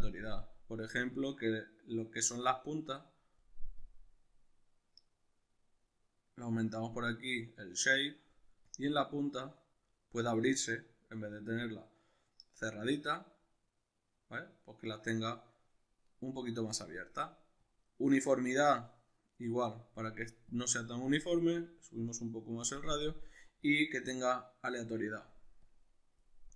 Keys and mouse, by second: 1.1-26.5 drag.